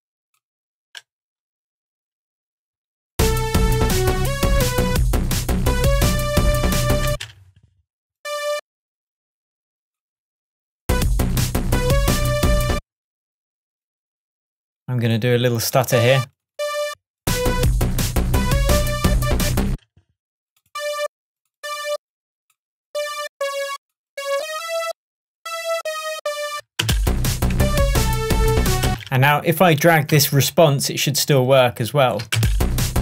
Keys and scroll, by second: 7.1 space, 12.8 space, 19.7 space, 28.9 space.